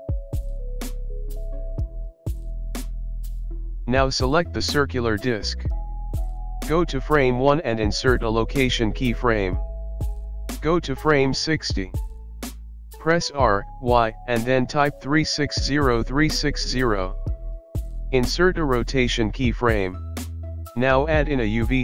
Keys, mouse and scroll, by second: 0.3 space, 0.6 click, 1.0 click, 2.0 click, 3.0 click, 4.2 click, 6.7 i, 8.4 click, 13.0 ctrl+z, 13.0 i, 13.0 r, 16.2 i, 18.0 click, 20.4 shift+middle click, 20.4 click, 20.6 shift+a.